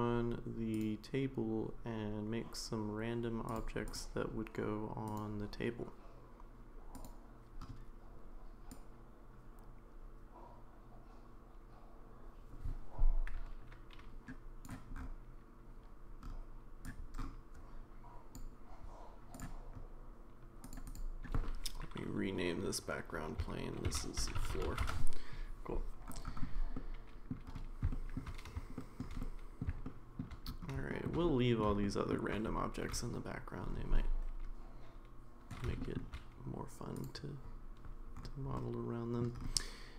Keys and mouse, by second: 0.7 click, 3.5 click, 3.9 click, 5.1 click, 6.9 click, 8.8-14.6 drag, 16.8-18.4 drag, 20.7 click, 20.9-25.4 drag, 26.7-27.3 middle drag, 27.9 shift+middle drag, 28.8 shift+middle drag, 29.2-29.6 middle drag, 29.8-30.2 shift+middle drag, 30.9 shift+middle drag, 31.3-31.6 middle drag, 31.8-32.1 shift+middle drag, 35.8 shift+middle drag, 37.0 click, 38.5-39.2 middle drag.